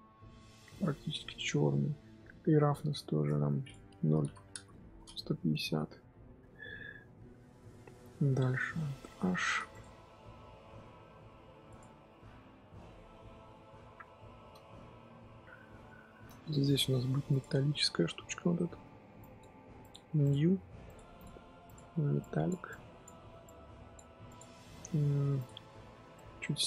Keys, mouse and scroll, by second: 2.7-4.5 drag, 4.5 KP_Enter, 4.9 scroll down 5, 5.2 Tab, 5.3 scroll up 1, 5.6 z, 6.6-8.9 middle drag, 8.9 alt+h, 9.7 click, 10.0-11.7 middle drag, 11.7 click, 12.1-17.3 middle drag, 17.3 click, 20.2-21.5 drag, 21.6 click, 22.7-24.6 drag, 26.1 click.